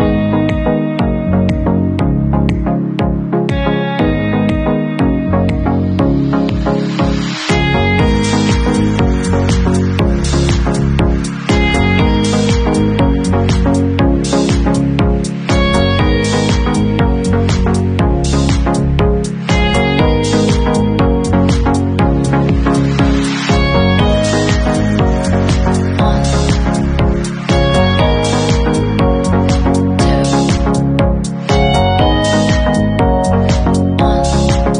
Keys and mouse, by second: 1.9 middle click, 2.3-5.8 drag, 5.8 middle click, 6.0-14.0 drag, 7.8 Tab, 14.0 alt+middle click, 14.1 alt+click, 14.5 Tab, 14.8 middle click, 15.0 click, 15.0 middle click, 15.9-23.2 alt+drag, 17.5 ctrl+z, 23.2-29.9 middle drag, 24.6 shift+z, 29.9-34.7 drag.